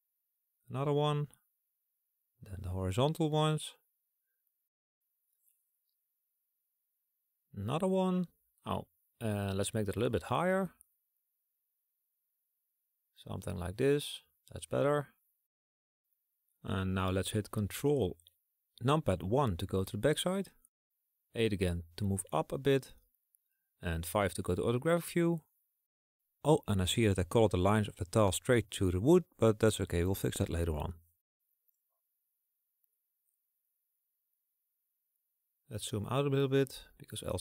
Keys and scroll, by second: 10.3 ctrl+z, 19.0 ctrl+KP_1, 20.9 KP_8, 21.8 KP_8, 22.2 KP_8, 22.5 KP_8, 23.8 KP_5, 35.2 KP_Subtract.